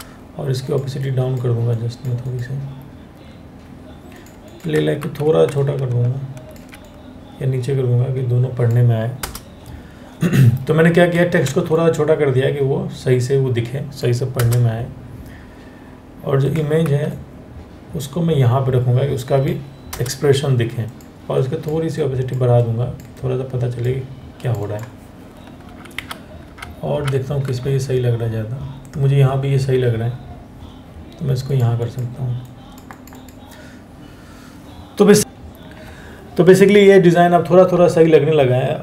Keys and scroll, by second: 4.6 ctrl+t, 8.8 Return, 11.0 ctrl+t, 13.9 Return, 16.5 ctrl+t, 19.5 Return, 22.4 Return, 25.3 Down, 25.6 Down, 26.1 Down, 26.6 Down.